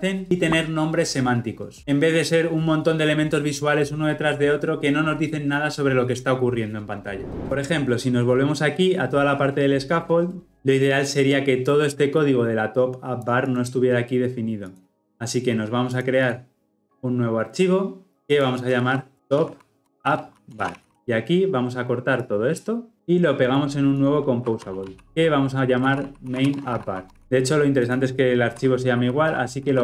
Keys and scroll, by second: 20.9 ctrl+alt+Left, 22.9 ctrl+x, 25.1 Return, 29.0 shift+F6.